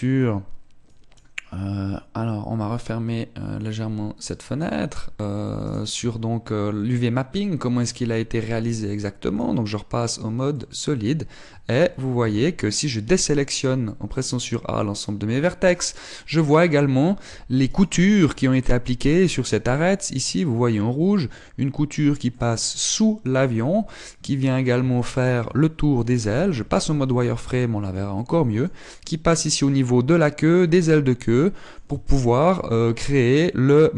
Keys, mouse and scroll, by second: 3.5 click, 6.2 right click, 6.6 Tab, 7.0-7.8 scroll up 4, 7.8 middle click, 9.2 click, 11.1 middle click, 12.0 Tab, 12.5 Tab, 12.8 a, 15.0 middle click, 16.5 middle click, 18.2 alt+right click, 21.2 middle click, 22.8 middle click, 23.6 middle click, 24.0 middle click, 24.8 middle click, 25.5 shift+middle click, 26.8 z, 27.2 middle click, 28.2 shift+middle click, 28.7 middle click, 31.3-31.6 scroll down 4, 31.8 middle click, 32.6 shift+middle click.